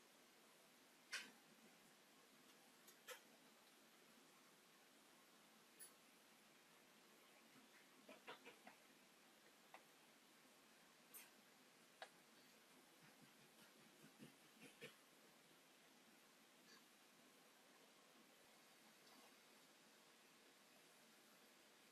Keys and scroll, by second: 2.3 s, 3.4 Escape, 3.7 space, 4.8 s, 9.2 space, 10.2 Escape, 21.0 alt+t, 21.6 space.